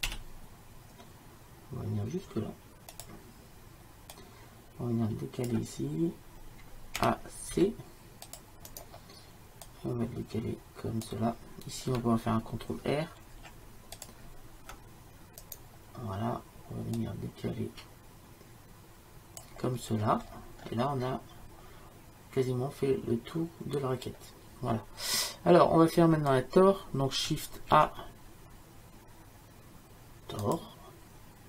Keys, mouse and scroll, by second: 0.1 e, 4.2-7.1 drag, 7.1 a, 7.6 c, 9.7 click, 13.4 ctrl+r, 17.0-19.2 drag, 19.9-24.5 middle drag, 29.8 shift+a.